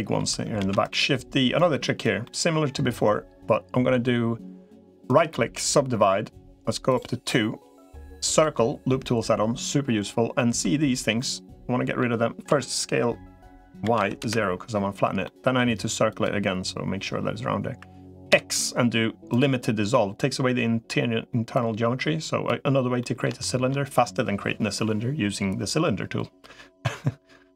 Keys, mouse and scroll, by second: 0.5 shift+d, 1.5 click, 2.0 middle click, 5.1 right click, 8.1 click, 10.2 middle click, 11.0 middle click, 12.3 s, 15.0 middle click, 15.9 click, 18.1 x, 21.3-22.3 drag, 22.8 middle click, 23.2 shift+middle click.